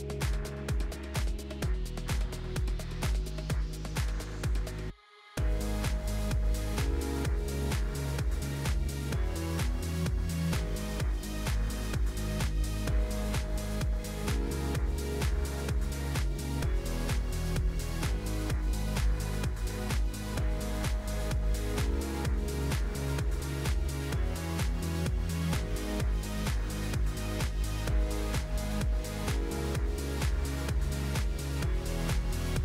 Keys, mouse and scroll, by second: 0.0 click, 0.8 click, 1.4 click, 1.9 scroll down 1, 2.2 scroll up 1, 2.7 click, 4.4-5.5 drag, 7.5-10.1 drag, 10.8 n, 11.1 click, 11.9 click, 18.7-20.3 drag, 20.6 click, 22.5 shift+a, 29.5 click, 30.3-31.4 scroll down 6, 31.4 g.